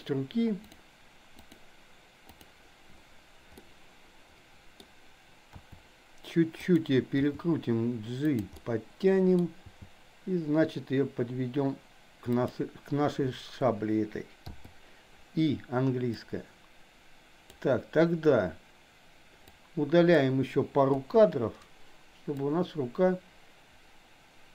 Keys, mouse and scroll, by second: 0.7 click, 2.3 click, 3.5-4.8 middle drag, 5.5 r, 7.3 g, 8.5-9.4 middle drag, 9.7 g, 14.5 i, 16.3 click, 19.5-20.3 drag, 21.0 Delete, 22.4-24.5 drag.